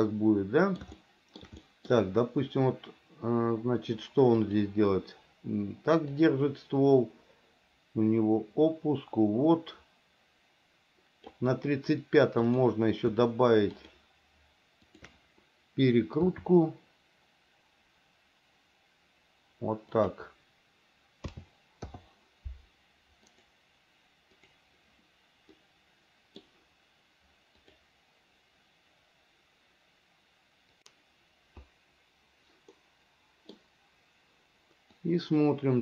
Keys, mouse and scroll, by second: 1.1 shift+middle click, 1.7 middle click, 4.6 click, 6.3-11.6 drag, 12.6 click, 13.9 shift+click, 15.1 shift+click, 16.4 r, 21.4 a, 22.0 i, 25.7 middle click, 33.0 middle click, 35.2-35.8 drag.